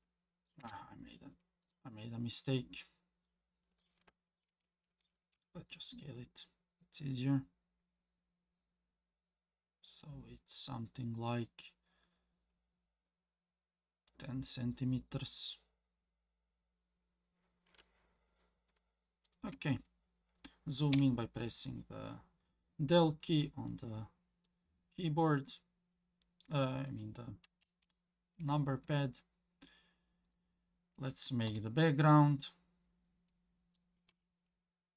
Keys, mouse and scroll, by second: 4.5 ctrl+z, 5.4 s, 20.9 KP_Decimal, 22.9-24.5 middle drag, 24.7-25.3 scroll down 2, 25.3-26.4 middle drag, 28.6-30.2 scroll down 2, 30.2 click, 31.5 KP_1, 32.4 scroll down 1, 33.3-33.7 middle drag, 34.1 Tab.